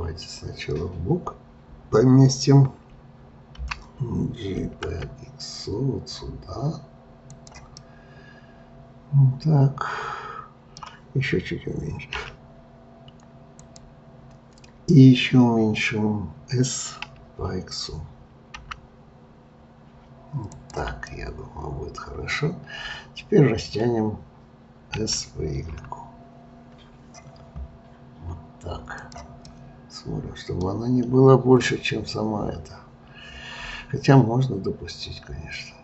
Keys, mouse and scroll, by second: 3.6 g, 7.8-10.8 middle drag, 12.2 s, 17.1 s, 21.1-24.1 middle drag, 25.0 s, 29.5-32.6 middle drag.